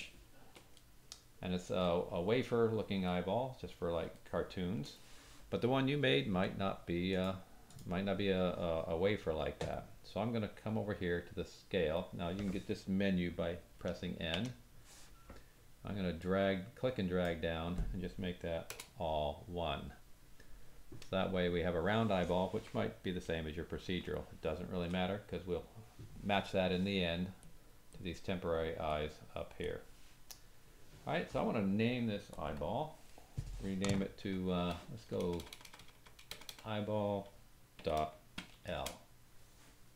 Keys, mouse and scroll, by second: 0.8-1.9 middle drag, 1.9 drag, 2.0 middle click, 2.0 drag, 2.2 middle click, 2.7-3.2 drag, 4.1 shift+drag, 4.4-4.8 shift+middle drag, 7.1 click, 7.2-7.6 middle drag, 7.6 click, 7.7-16.2 middle drag, 13.7 n, 14.3 n, 16.2-19.4 drag, 20.4-24.1 drag, 21.1-23.7 scroll down 2, 24.1-24.8 shift+middle drag, 24.8-27.5 drag, 27.9 click, 28.9 click, 29.6 click, 32.3 click, 32.4-39.9 drag, 35.2-36.4 typing.